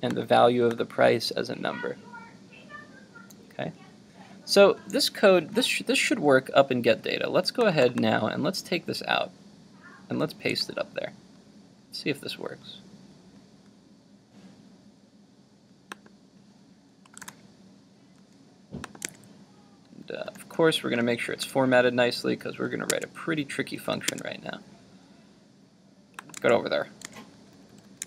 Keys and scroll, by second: 10.5 super+x, 17.2 super+v.